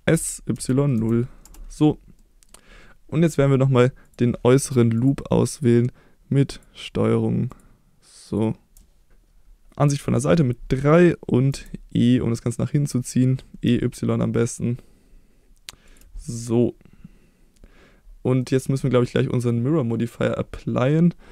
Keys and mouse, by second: 0.1 s, 0.5 y, 0.9 0, 1.4 Return, 2.1 middle click, 4.0 click, 6.5 ctrl+click, 8.2 middle click, 9.8 KP_3, 11.5 e, 13.6-15.9 y, 15.9 click, 16.3-17.5 middle drag, 18.4 middle click, 19.1-21.3 middle drag.